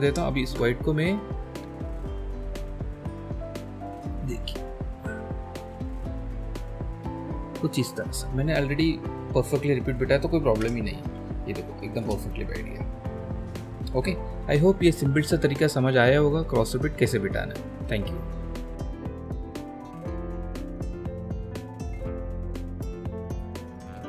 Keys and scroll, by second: 0.4 ctrl+h, 10.7 ctrl+alt+space.